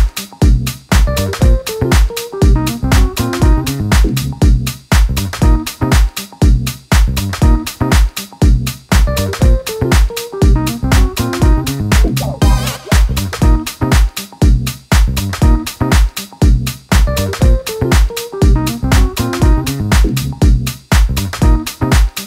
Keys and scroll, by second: 16.9 super+d.